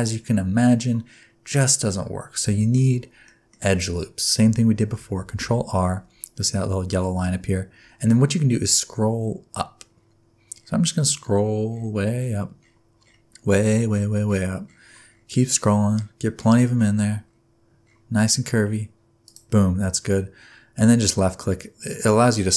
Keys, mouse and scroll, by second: 2.6 shift+middle click, 3.3 middle click, 5.3 ctrl+r.